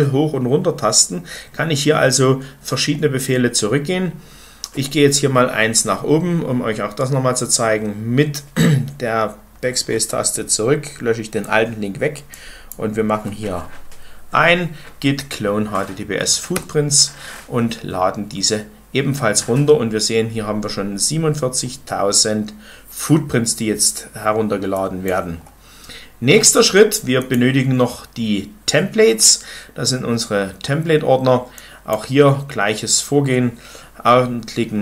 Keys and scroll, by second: 0.4 Up, 0.8 Down, 1.4 Up, 1.7 Up, 2.4 Down, 2.6 Down, 3.3 Down, 4.7 Up, 5.7 BackSpace, 6.2-16.5 BackSpace, 16.5 Return.